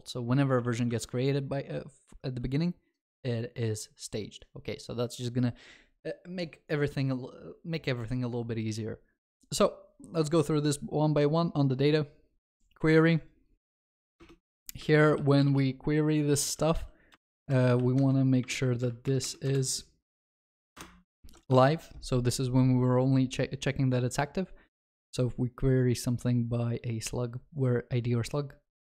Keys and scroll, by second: 1.0 ctrl+s, 17.2 Return, 21.2 ctrl+alt+shift+l, 21.6 ctrl+s.